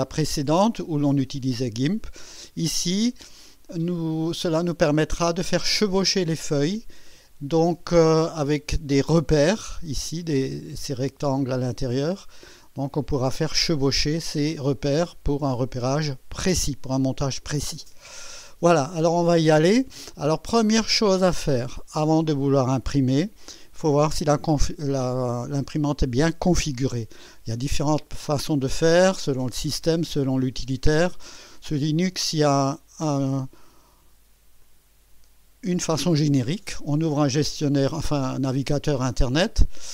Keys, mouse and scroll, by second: 32.6 click, 34.7 click.